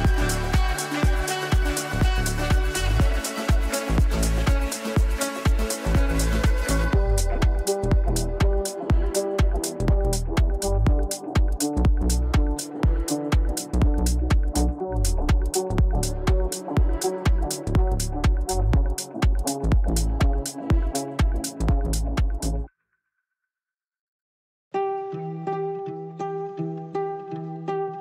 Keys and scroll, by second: 3.9 g, 17.8 g, 20.6 ctrl+z, 25.0 g.